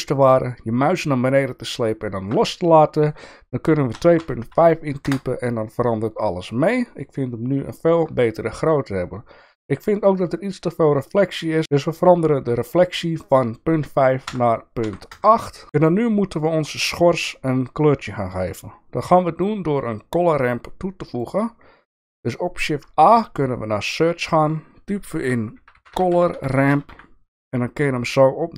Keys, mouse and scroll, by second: 13.3-15.6 drag, 17.8 click, 18.9 click, 19.8 click, 21.0 click, 22.5 shift+a, 26.3 r.